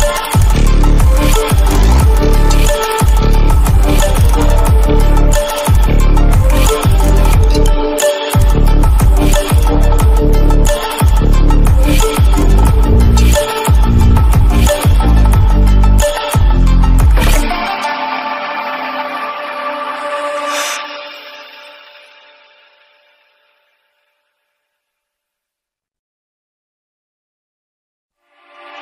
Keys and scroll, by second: 0.8 ctrl+-, 1.1 ctrl+=, 3.2 ctrl+=, 12.8 ctrl+=, 13.7 ctrl+=.